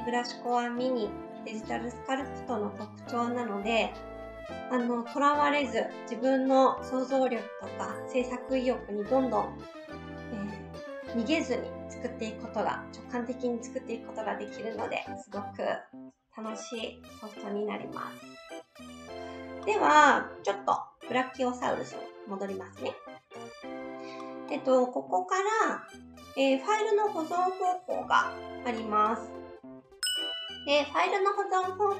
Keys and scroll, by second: 20.7 ctrl+z.